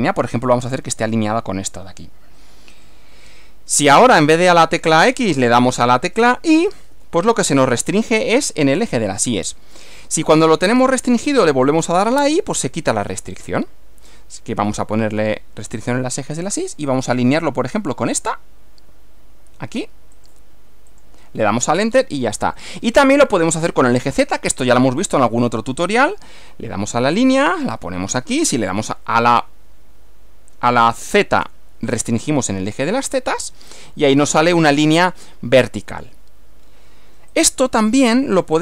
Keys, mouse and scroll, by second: 2.8 click, 4.1 click, 5.4 click, 6.9 y, 12.1 y, 14.6 y, 20.2 click, 20.9 click, 22.6-23.7 middle drag, 24.1-25.1 middle drag, 26.1 click, 27.6 click, 28.8 x, 31.5 z, 33.0 click, 33.7-36.3 middle drag, 37.3 click.